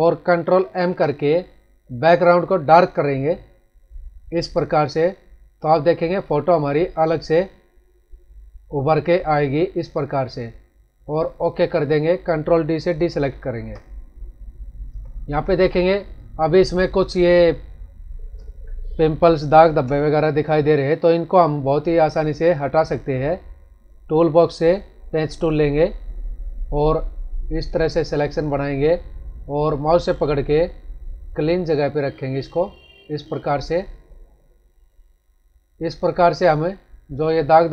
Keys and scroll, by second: 0.7 ctrl+m, 13.3 ctrl+d, 14.8 ctrl+=, 17.0 space.